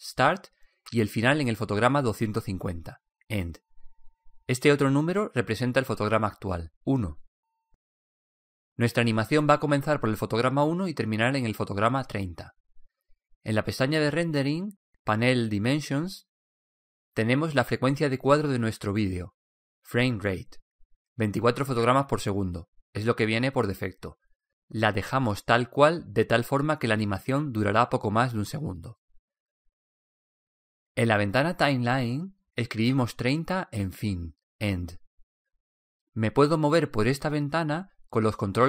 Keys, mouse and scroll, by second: 15.6-17.5 drag, 34.6-36.4 drag.